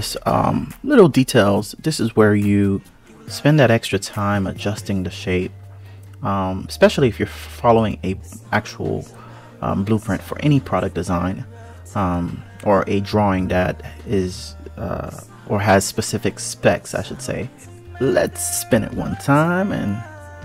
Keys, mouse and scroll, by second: 0.1 click, 2.3 click, 3.5 click, 6.5 alt+z, 6.9 click, 8.0 click, 14.3 click, 14.7 a, 15.5 KP_Decimal, 15.9 KP_3, 16.9 click, 17.6 click.